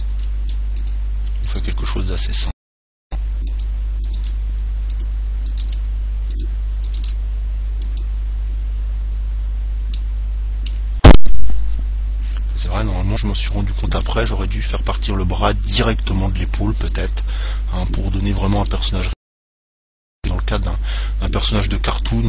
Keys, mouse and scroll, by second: 0.5 g, 1.8 g, 4.2 click, 4.2-6.8 right drag, 5.9 g, 6.7-10.2 drag, 7.2 g, 7.6 right click, 10.8-12.0 middle drag, 12.5-15.4 middle drag, 18.4-18.9 scroll down 1, 18.9-20.8 middle drag.